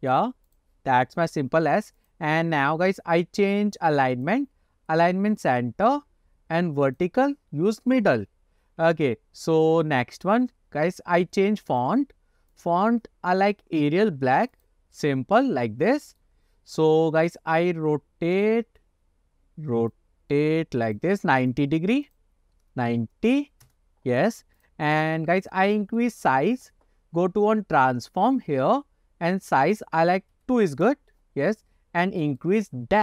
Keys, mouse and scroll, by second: 0.2-0.7 drag, 2.1 click, 3.0-3.5 drag, 4.2-5.5 drag, 7.1-8.1 drag, 8.6 scroll up 1, 9.0 shift+middle click, 11.8 click, 12.6 click, 15.2-15.6 scroll up 2, 15.6-16.3 middle drag, 16.5-16.8 scroll down 1, 18.5 click, 20.0-21.1 drag, 21.6 click, 22.2-23.8 drag, 24.7 click, 25.0 click, 25.6-26.1 middle drag, 28.8 scroll down 1, 29.8-31.1 drag, 31.6-32.5 middle drag.